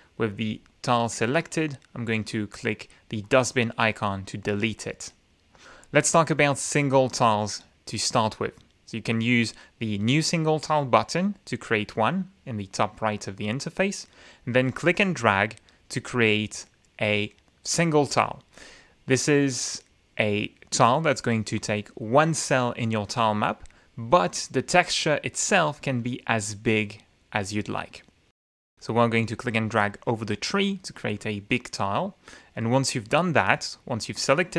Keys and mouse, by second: 0.3 click, 3.2 click, 6.3 click, 14.8-18.9 drag, 29.0-30.0 drag.